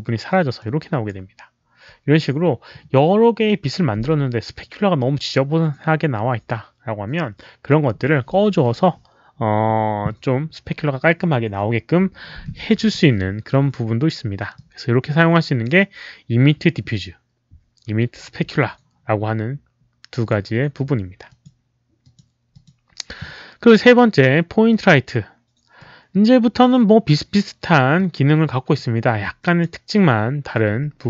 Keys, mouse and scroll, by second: 0.5 click, 14.5-15.6 drag, 20.1 click, 21.2 click, 22.0 click, 22.5 click, 24.6 click, 25.7 click, 27.9 click, 29.3 drag, 30.8 w.